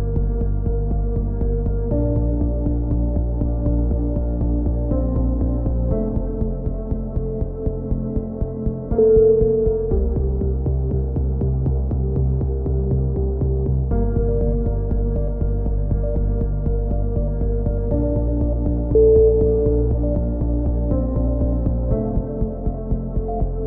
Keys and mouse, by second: 0.2-1.2 drag, 2.4 a, 2.9-3.9 middle drag, 3.5 z, 3.9-4.9 drag, 5.1 KP_3, 5.2-6.7 middle drag, 5.6 z, 7.3 KP_7, 8.4 z, 8.6 z, 9.2-11.0 drag, 12.2 z, 12.3 z, 12.8 a, 13.6 ctrl+r, 16.1 click, 17.1-18.3 drag, 18.3-20.7 typing, 21.2 click, 22.7 right click, 23.2 click.